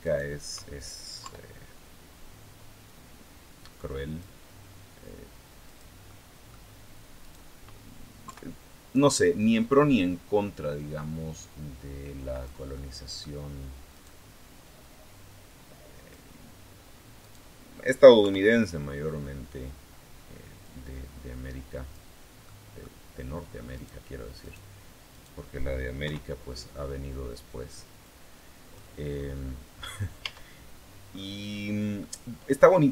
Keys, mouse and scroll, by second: 1.0 KP_3, 2.6-4.2 drag, 5.4 click, 5.8 middle click, 7.0 right click, 8.0 KP_3, 9.7-12.5 drag, 12.4 middle click, 13.7 right click, 15.2 click, 17.0 right click, 18.0 KP_3, 20.4-21.9 drag, 22.2 middle click, 23.5 right click, 24.2 right click, 24.9 right click, 25.8 KP_3, 27.8 click, 29.0 scroll down 1, 29.5-29.9 scroll up 1, 30.0 Tab, 30.4-30.7 scroll down 1, 30.7 middle click, 30.9 scroll up 1, 31.2 middle click, 31.3 scroll down 1, 31.8-32.9 middle drag.